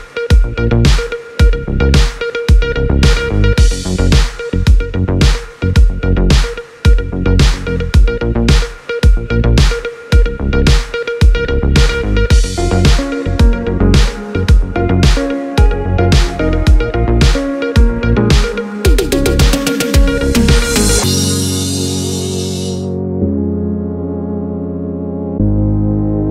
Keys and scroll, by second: 7.7 space, 15.1 space, 19.1 space.